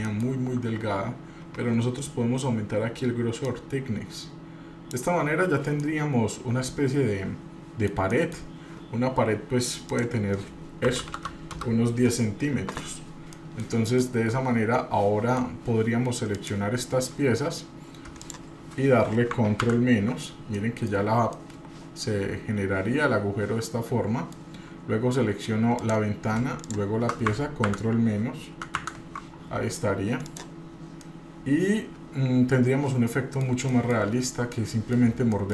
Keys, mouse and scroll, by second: 0.0 shift+middle click, 3.5-4.9 drag, 5.4 scroll down 1, 5.8-8.3 middle drag, 9.9-12.1 drag, 13.3-13.6 middle drag, 13.6 scroll down 1, 14.0-15.4 middle drag, 16.3 click, 18.2 shift+click, 19.6 ctrl+KP_Subtract, 20.5 middle click, 21.0 scroll up 1, 21.5-24.4 middle drag, 25.8 click, 26.6 shift+click, 27.6 ctrl+KP_Subtract, 28.6 ctrl+KP_Subtract, 28.9 ctrl+KP_Subtract, 30.2 click, 30.7 scroll down 2, 31.0-33.4 middle drag, 33.7 shift+middle click, 34.1-34.7 scroll up 2, 34.5 middle click, 35.3 shift+middle click.